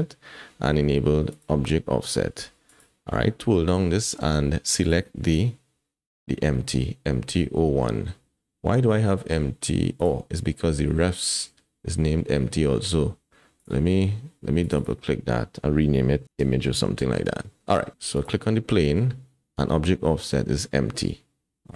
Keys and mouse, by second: 1.3 click, 2.7 click, 4.8-10.1 drag, 13.6 click, 14.8-17.2 drag.